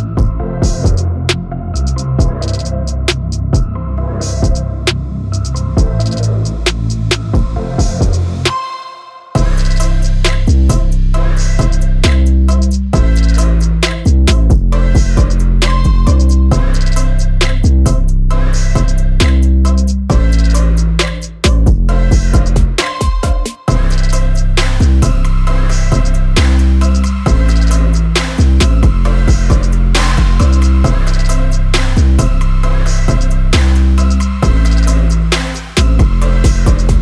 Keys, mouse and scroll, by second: 0.3 F9, 1.5 click, 5.2 shift+click, 7.5-14.6 drag, 16.5 typing, 21.8-22.5 typing, 26.8 F9, 27.0 click, 31.6 typing.